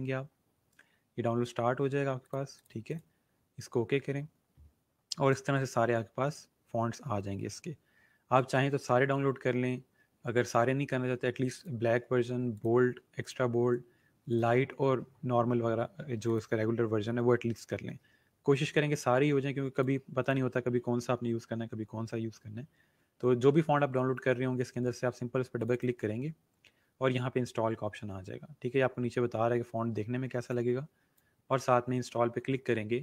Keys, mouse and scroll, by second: 2.2 click, 11.5 click, 16.2 click, 19.7 click, 25.6 click, 29.0-29.6 scroll down 1, 30.4 click.